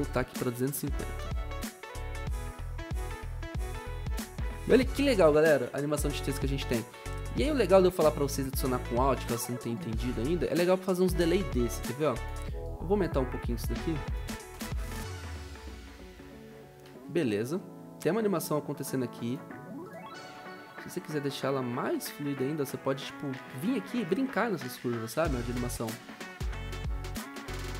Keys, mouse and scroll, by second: 0.1-1.0 typing, 16.8 o.